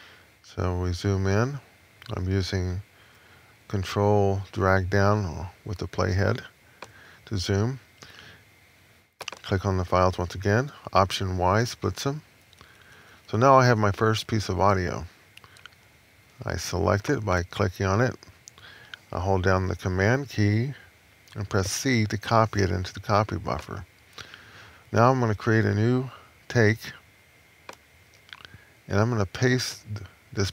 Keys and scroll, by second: 11.2 alt+y, 12.3 Left, 21.4 super+c.